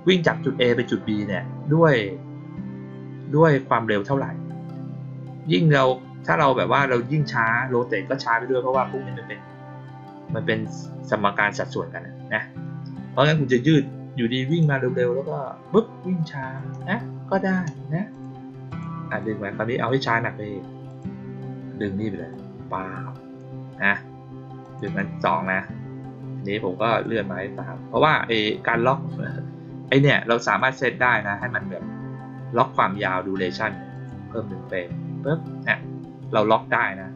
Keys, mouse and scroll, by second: 8.7 click, 14.4 click, 16.5 click, 18.0 click, 18.6 click, 19.1-19.8 drag, 20.8 click, 22.2-23.3 drag, 24.5 click, 24.8 click, 26.9-28.7 drag, 29.8 click, 30.4 click, 31.3-32.7 drag, 33.8 click, 34.4 middle click.